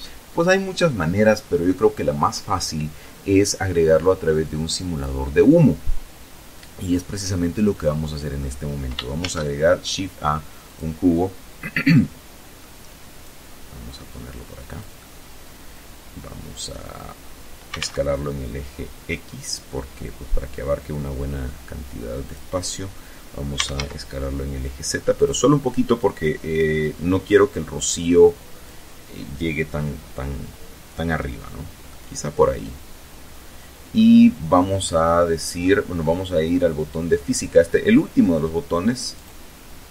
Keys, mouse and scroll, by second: 5.5-5.8 scroll down 2, 6.0-7.2 drag, 7.9 shift+a, 9.3 click, 10.5 middle click, 11.9-15.6 drag, 13.6-15.6 middle drag, 16.1-17.0 typing, 20.9 click, 22.0-22.9 typing, 23.8 click, 24.6-27.5 drag, 30.6-32.7 middle drag, 34.3 middle click, 37.7 click, 39.7 click.